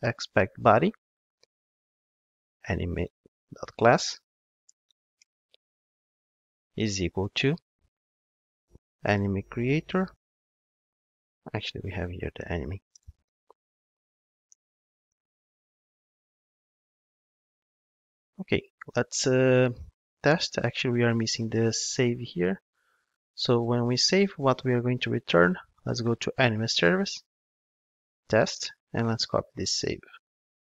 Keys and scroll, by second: 2.8 Return, 14.2 super+z, 30.2 super+c.